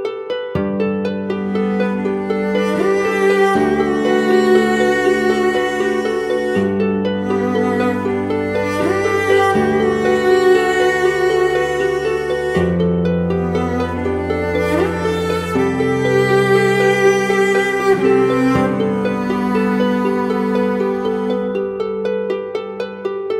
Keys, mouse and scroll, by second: 3.2 alt+click, 8.8 right click, 10.6 typing, 11.8 typing, 11.8 double click.